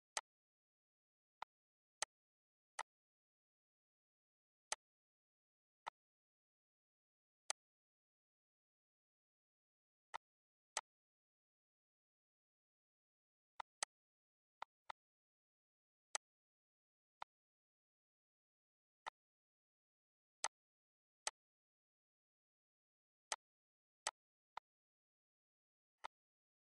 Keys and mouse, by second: 1.1 click, 1.7 click, 2.5 click, 4.4 click, 5.6 click, 7.2 click, 9.9 click, 10.5 click, 13.4 click, 14.4 click, 15.9 click, 16.9 click, 18.8 click, 20.2 click, 21.0 click, 23.1 click, 23.8 click, 25.7 click, 26.6 click.